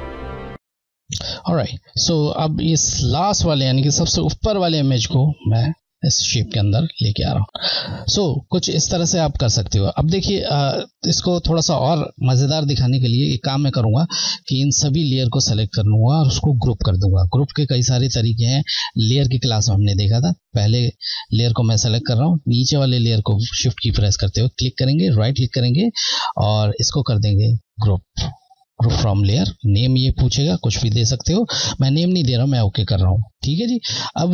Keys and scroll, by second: 4.4 Left, 6.8-7.4 scroll, 21.7 Left, 24.0 Left, 25.1 Right, 28.6 Left, 32.2 Left.